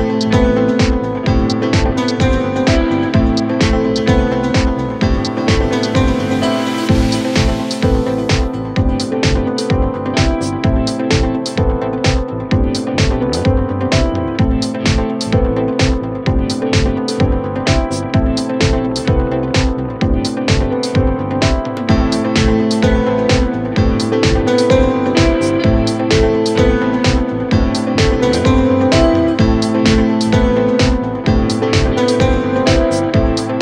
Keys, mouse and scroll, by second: 0.1 shift+Left, 0.8 shift+Right, 3.1 shift+Right, 4.4 space, 6.0 Down, 6.3 Down, 6.6 Right, 6.7 Right, 6.9 right click, 7.2 right click, 7.5 right click, 7.9 Right, 8.5 Right, 8.6 click, 9.0 Left, 9.4 Down, 10.5 Left, 10.7 Down, 11.6 Right, 12.8 Left, 13.7 Right, 14.8 Left, 31.2 Up, 31.5 Up, 31.7 Up, 33.4 Right.